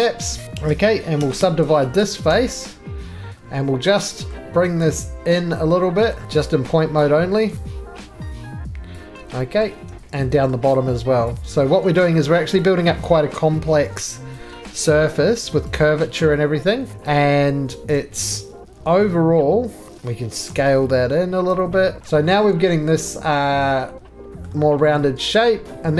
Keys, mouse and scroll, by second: 0.4 click, 0.4 3, 1.2 s, 1.4 s, 2.3 s, 4.3 middle click, 4.4-5.3 scroll down 1, 5.5 click, 6.1 middle click, 6.2 scroll down 1, 6.2 1, 6.5 scroll, 6.9 click, 7.5 ctrl+z, 7.5-8.9 scroll, 7.5 g, 8.9 click, 9.5 middle click, 9.6 middle click, 9.8 scroll, 10.0 scroll down 2, 10.5 shift+middle click, 11.2 click, 11.5 right click, 12.5 click, 13.2 middle click, 13.5 g, 15.4 click, 15.7 right click, 16.9 click, 17.9 shift+click, 18.7 g, 19.9 middle click, 19.9 right click, 19.9 click, 20.6 s, 22.0 click, 22.0 right click, 22.0 middle click, 22.1 2, 24.4 middle click, 25.7 middle click.